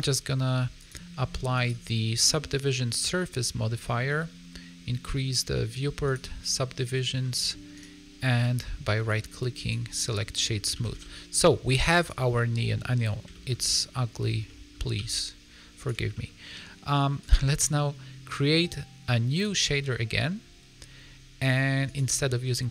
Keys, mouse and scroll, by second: 0.7 click, 1.5 click, 3.5 middle click, 6.0 click, 7.2 middle click, 7.7 right click, 10.0 middle click, 10.7 a, 10.9 a, 10.9 middle click, 11.9 click, 12.3 middle click, 13.3 shift+middle click, 13.6 middle click, 14.4 middle click, 14.6 shift+middle click, 14.9 g, 16.1 middle click, 17.1 click, 19.3 click, 21.8 click.